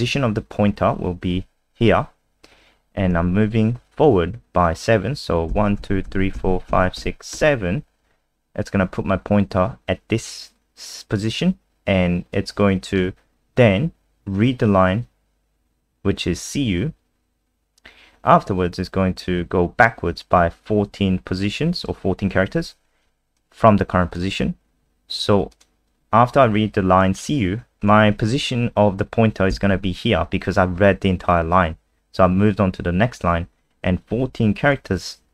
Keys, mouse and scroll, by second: 5.5 Right, 5.8 Right, 6.0 Right, 6.3 Right, 6.7 Right, 7.0 Right, 7.3 Right, 12.3 click, 17.7-20.6 scroll down 1, 20.9 click, 29.5 Right.